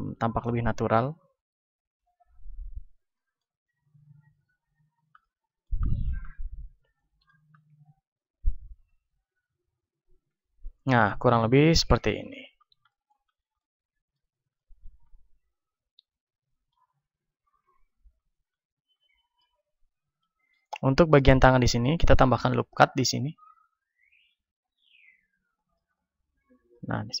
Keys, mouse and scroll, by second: 2.9-9.3 middle drag, 8.7 ctrl+Tab, 10.3 KP_1, 10.5-17.6 middle drag, 17.6 KP_1, 18.2-22.8 middle drag, 22.1 ctrl+r, 24.7-27.0 drag, 25.7 middle click, 26.0-27.0 right drag, 27.0-27.2 middle drag.